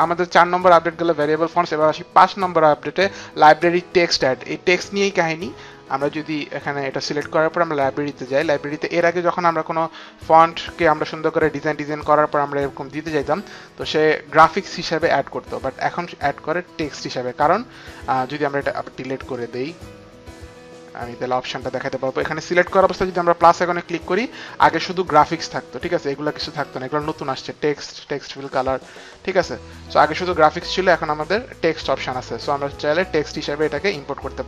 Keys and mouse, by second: 6.2 click, 7.8 click, 12.1 click, 18.8 click, 19.3 right click, 21.1 click, 23.5 click, 23.5 right click, 26.5 click, 26.6 click, 30.8 click.